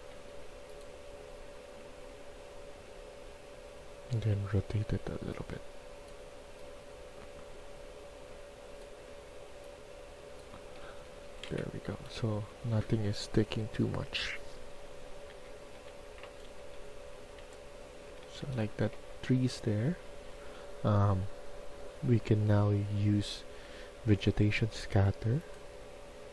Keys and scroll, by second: 0.0-0.5 typing, 3.2 s, 4.0 s, 11.4 z, 12.4 typing, 14.6-18.2 typing.